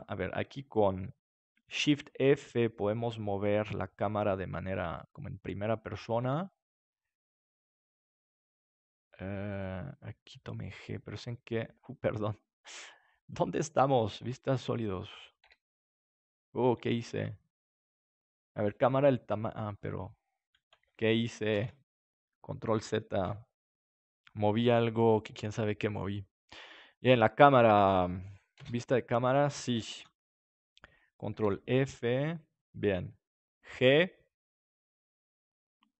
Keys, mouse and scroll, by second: 0.0-1.8 right drag, 1.8 shift+f, 5.0-6.7 drag, 6.2 g, 9.7-15.0 drag, 15.4 KP_7, 16.3-20.4 middle drag, 24.1 ctrl+z, 26.9-28.7 drag, 28.5 KP_0, 29.9 ctrl+s, 31.3 shift+f, 32.8-34.5 drag, 33.7 g.